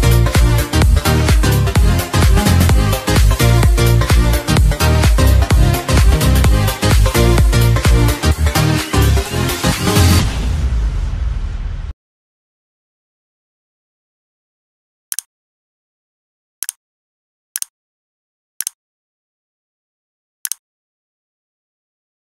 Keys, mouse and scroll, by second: 3.4 click, 8.2 ctrl+c, 8.6 click, 8.9 v, 9.5 click.